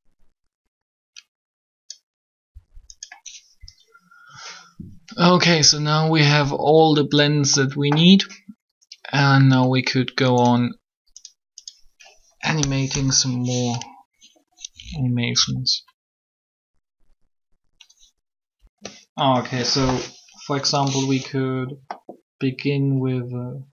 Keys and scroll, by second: 12.8 3.